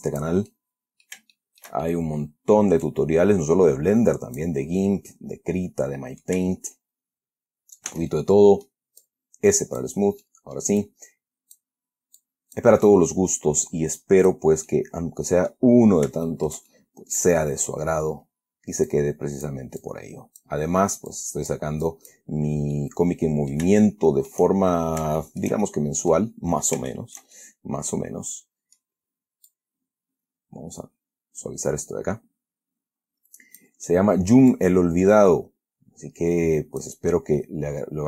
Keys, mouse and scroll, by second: 0.8-1.6 middle drag, 1.7-2.1 shift+middle drag, 2.5 middle click, 3.2-4.9 drag, 5.2-6.7 drag, 8.2 s, 8.4-9.2 middle drag, 9.3 click, 10.5-11.1 middle drag, 12.5-13.9 drag, 14.3 click, 15.0-16.0 middle drag, 16.1-16.6 scroll down 3, 16.6-17.9 shift+middle drag, 19.2 click, 20.1 click, 21.4 click, 22.2 click, 22.7 scroll down 1, 23.1-24.8 middle drag, 25.0 shift+scroll down 1, 25.5-25.9 shift+middle drag, 26.3 middle click, 26.7-27.0 scroll up 1, 27.2-29.3 shift+middle drag, 29.8-34.1 drag, 34.2-34.8 middle drag, 34.8-37.3 drag, 37.7-38.0 middle drag.